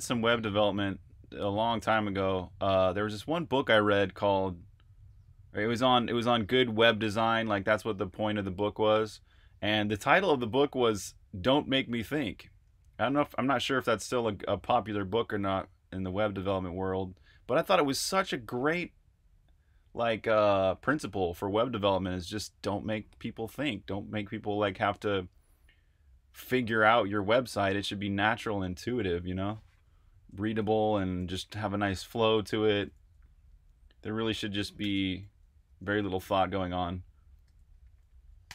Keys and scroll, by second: 32.2-37.2 typing, 38.3-38.5 typing.